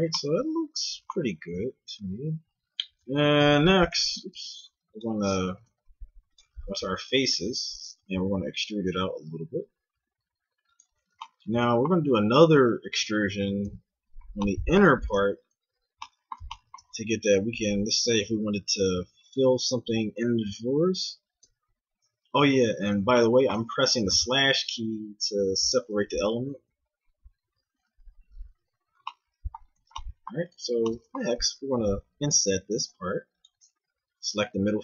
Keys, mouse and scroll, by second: 3.0 Tab, 3.9 Tab, 4.4 ctrl+Tab, 5.5 ctrl+Tab, 6.7 click, 8.3 click, 8.3 e, 12.0 a, 13.7 KP_Divide, 17.5 e, 19.8 KP_3, 20.4 KP_Divide, 21.4 KP_3, 22.4 z, 24.0 g, 26.2 z, 26.7 z, 28.2 KP_Divide, 29.8 z, 31.7 i.